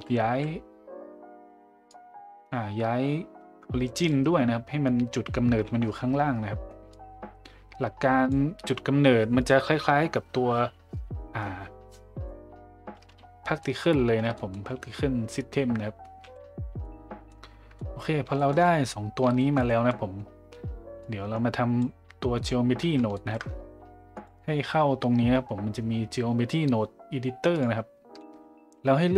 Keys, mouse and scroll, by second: 0.3 a, 1.9-4.1 drag, 6.9-8.3 drag, 13.6 middle click, 14.2 Tab, 14.3 middle drag, 16.8-17.3 middle drag, 17.7 middle drag, 18.3 shift+middle drag, 18.6 middle drag, 19.4 shift+middle drag, 19.7 middle drag, 21.0 click, 23.1 shift+middle drag, 24.1-27.6 drag.